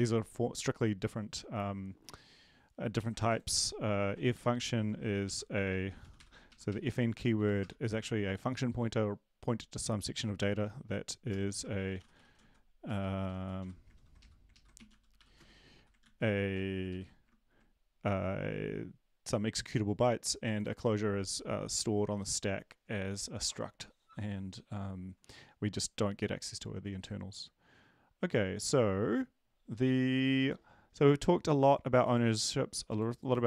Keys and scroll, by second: 5.4-7.6 typing, 6.7 Right, 6.8 Right, 7.3 End, 12.1-15.7 typing, 14.2 Left, 15.7 Right, 16.0 ctrl+s, 16.9 ctrl+Right.